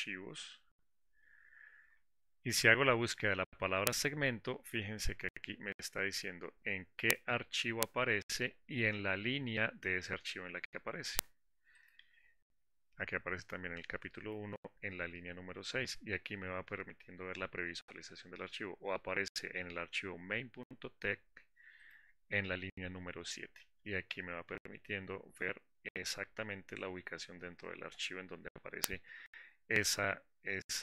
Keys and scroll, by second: 0.4 ctrl+shift+f, 1.1 ctrl+shift+f.